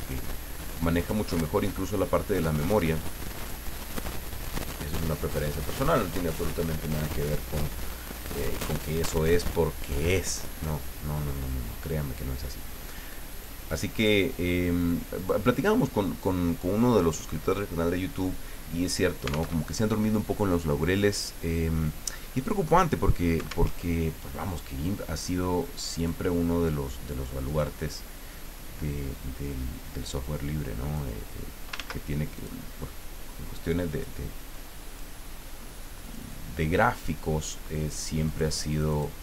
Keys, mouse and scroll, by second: 0.9 click, 1.6 click, 2.0-3.7 drag, 5.7 click, 9.8 click, 11.3 click, 13.3 click, 13.9 click, 15.2 click, 19.5 alt+Tab, 23.7 alt+Tab, 26.0 click, 27.4 click, 28.3-31.1 drag, 31.7 ctrl+z, 32.3 ctrl+click, 33.9 click, 34.5 click, 36.0 click, 38.3 click.